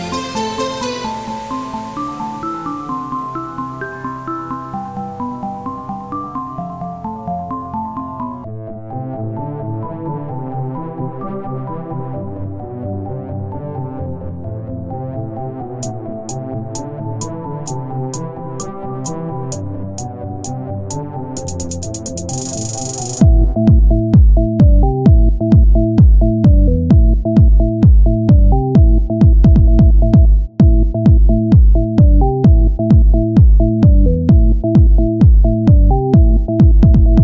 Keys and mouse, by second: 4.1 KP_1, 4.6 z, 5.8 z, 6.3-8.0 drag, 8.4 r, 10.7-11.8 drag, 12.5 KP_1, 13.8 shift+d, 15.9 click, 16.9 click, 18.5 right click, 19.3 ctrl+j, 23.1 KP_1, 23.9 z, 24.8 z, 25.7-27.2 drag, 25.9 shift+a, 28.9 s, 33.7 click, 34.3-36.4 drag, 36.4 KP_3.